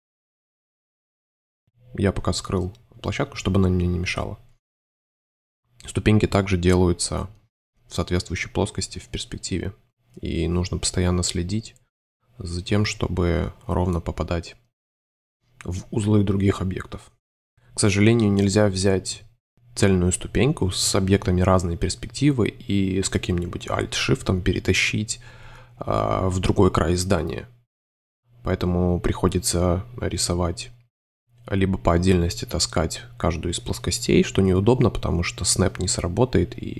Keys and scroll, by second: 0.1 shift+Tab, 1.2 shift+Tab, 3.5 super+y, 8.7 2, 13.4 super+z, 16.4 super+space, 20.2 space, 22.1 super+z, 24.3 space, 26.4 3, 29.8 shift+v, 30.5 space, 31.6 alt+super+y, 31.7 super+v, 33.6 alt+super+3, 34.4 shift+v, 34.6 space, 34.9 super+s, 35.6 space.